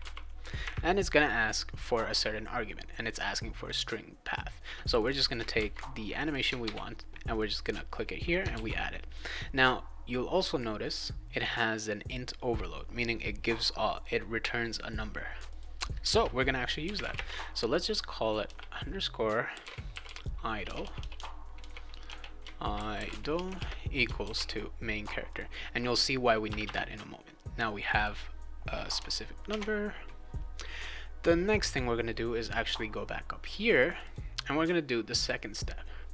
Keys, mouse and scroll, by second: 0.0-0.5 typing, 4.9 click, 5.1 click, 5.5 ctrl+c, 6.2 click, 6.6 ctrl+v, 7.3 click, 8.5 ctrl+s, 15.4 click, 16.5-24.0 typing, 24.2 ctrl+s, 25.3 click, 26.5 Return, 26.6 Return, 27.8 click, 27.9 click, 29.5 alt+Tab, 33.7 click, 33.9 click, 34.0 click.